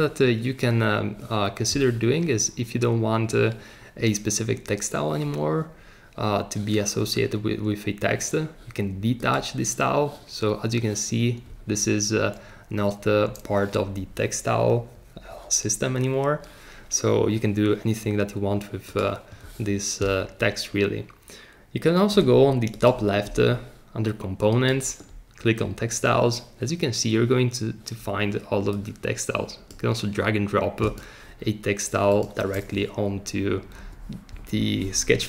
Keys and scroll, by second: 33.7 BackSpace.